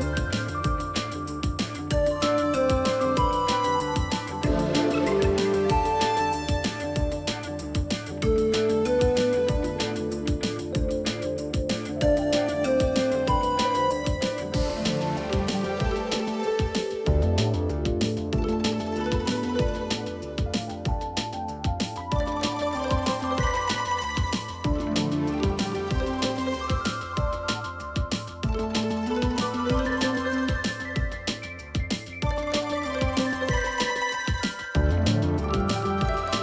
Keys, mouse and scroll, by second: 0.8 double click, 1.1 space, 6.3 double click, 6.3 space, 7.7 space, 8.6 space, 9.7 right click, 10.7 double click, 11.9 Delete, 12.6 double click, 13.7 space, 16.0 double click, 16.3 alt+scroll up 1, 16.5 space, 17.0 t, 17.5 ctrl+a, 18.0 w, 19.4-22.0 typing, 31.6 alt+scroll down 1, 32.8 space, 33.3 alt+scroll, 33.4 alt+scroll up 1, 33.6 space, 34.0 double click, 35.3 i, 35.9 space.